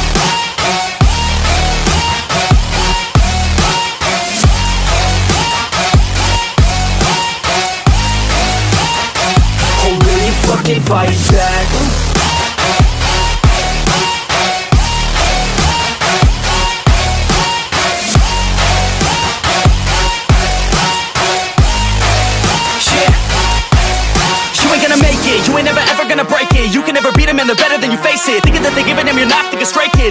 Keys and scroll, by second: 10.5 ctrl+d, 12.6 ctrl+d, 16.4 ctrl+s, 16.8 ctrl+d, 20.1 ctrl+d, 22.0 ctrl+z, 24.0 ctrl+d.